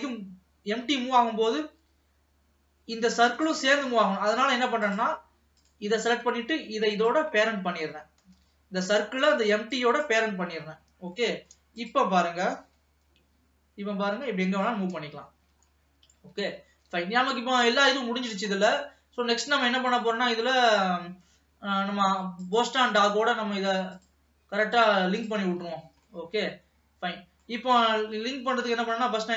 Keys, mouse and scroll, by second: 0.1 click, 4.9 click, 5.7 click, 7.4 shift+click, 8.4 ctrl+p, 10.8-11.4 scroll down 2, 11.4 middle click, 12.2 click, 12.7 g, 15.5 ctrl+s, 15.9-16.4 scroll up 2, 16.4 alt+a, 17.0 ctrl+s, 17.3-18.0 scroll up 2, 18.0 middle click, 18.8-20.7 scroll down 2, 20.7 click, 22.7 click, 24.5 click, 24.8 click, 25.3 click, 26.4-28.8 middle drag, 28.8 scroll down 1, 28.9-29.3 middle drag.